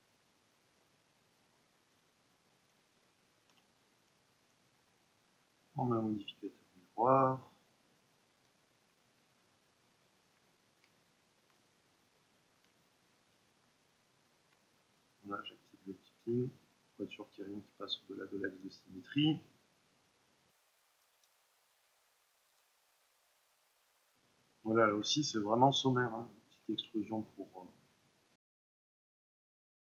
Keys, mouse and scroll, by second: 0.2 click, 0.5-1.9 middle drag, 1.9-3.4 drag, 3.4 Delete, 4.5-5.5 middle drag, 5.5-7.9 drag, 7.9-9.7 middle drag, 9.7-11.0 alt+drag, 11.0-12.1 ctrl+middle drag, 12.1-17.0 alt+drag, 17.0-18.6 middle drag, 18.6-20.6 drag, 20.6 middle click, 20.7 z, 21.6 click, 21.6-22.9 middle drag, 22.5 ctrl+r, 22.9 click, 23.0 middle click, 23.1-25.1 drag, 25.1-26.6 shift+middle drag, 26.6 e, 27.3 right click, 28.3 click, 28.7 s, 28.9 Return, 29.0 middle click, 29.4 KP_1, 29.7 click.